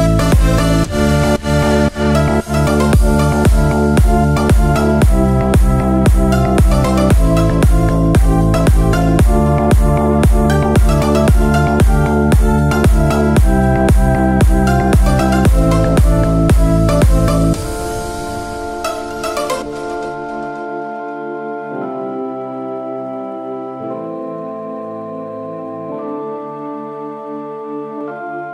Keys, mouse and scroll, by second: 1.4 click, 4.0-5.4 drag, 7.4-8.6 middle drag, 9.7 click, 12.5 click, 14.2-15.2 drag, 15.8 click, 18.5-20.3 middle drag, 21.1 click, 21.8 click, 24.0 click, 25.8 KP_1, 26.9-27.3 scroll up 2.